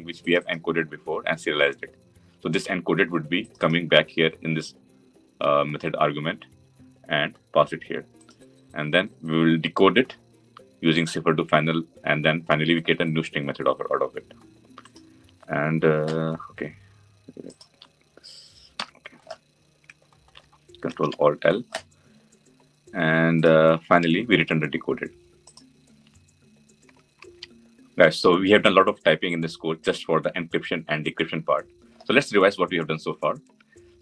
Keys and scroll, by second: 20.7 ctrl+alt+l.